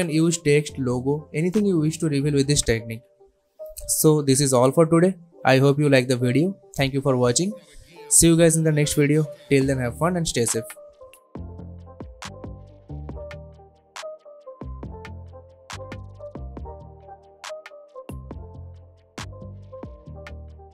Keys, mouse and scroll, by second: 3.1-3.7 alt+scroll up 1, 3.7-4.0 alt+scroll down 1, 4.4-5.0 click, 4.8 space, 7.5 space, 8.1 click, 9.4 ctrl+F9.